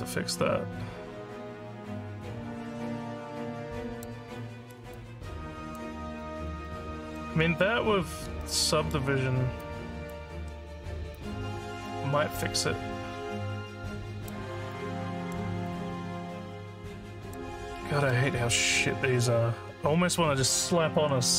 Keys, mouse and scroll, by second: 0.0-4.0 alt+drag, 4.4 alt+middle click, 4.9 alt+click, 6.2 alt+middle click, 6.6 alt+click, 8.4 alt+middle click, 9.6 alt+click, 11.2-14.3 alt+drag, 14.7 alt+middle click, 15.6-17.3 alt+drag.